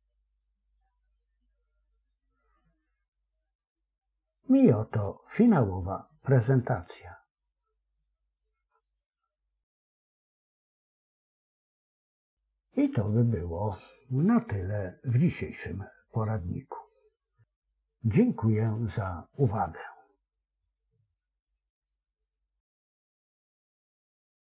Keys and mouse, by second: 7.3-11.2 typing.